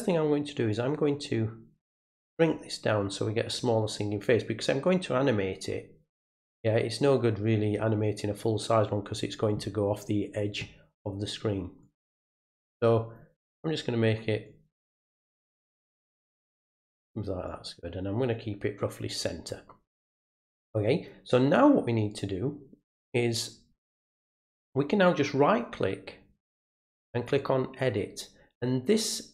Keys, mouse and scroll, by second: 0.7-1.8 drag, 3.3-6.5 drag, 11.8-13.1 drag, 14.5-16.4 drag, 17.5-19.5 drag, 24.3 right click, 27.1 click.